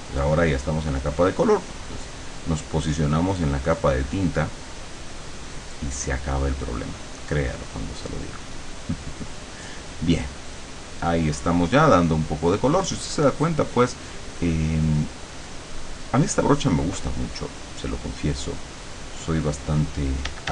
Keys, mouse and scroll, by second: 0.0-2.4 drag, 2.6-5.8 drag, 7.4 click, 8.0 click, 12.5-14.8 drag, 16.2 click, 17.2 click, 18.4 click, 18.8 click, 20.3 d.